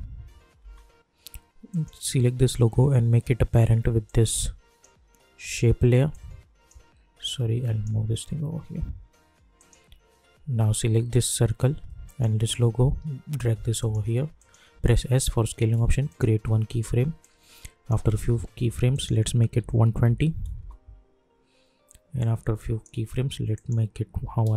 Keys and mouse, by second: 1.7 click, 4.0-9.5 drag, 12.0 shift+click, 13.0 [, 13.7 click, 14.8 s, 16.1-18.9 drag, 20.5 Return, 22.1-23.5 drag.